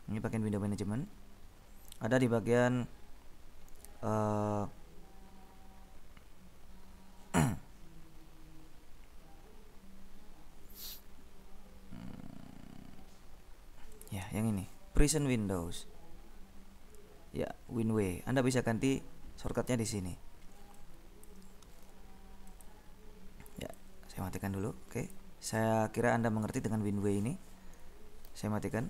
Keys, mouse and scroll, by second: 1.2-1.7 scroll down 2, 8.3-8.8 scroll down 2, 11.5-11.9 scroll down 2, 14.0 click, 15.2 click, 20.8 click, 22.7 click, 24.0 click, 25.2 click, 28.5 ctrl+b, 28.6 ctrl+click.